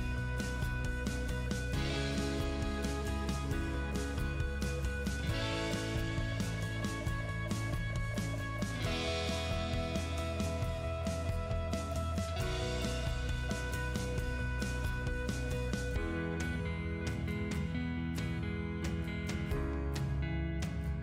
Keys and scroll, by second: 13.9 Escape.